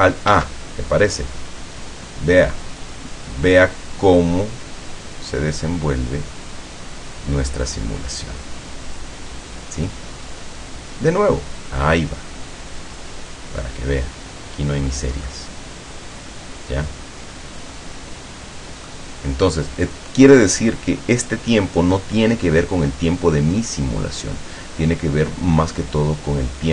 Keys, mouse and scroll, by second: 0.4 alt+a, 14.9-15.3 scroll down 2, 15.4-19.1 middle drag.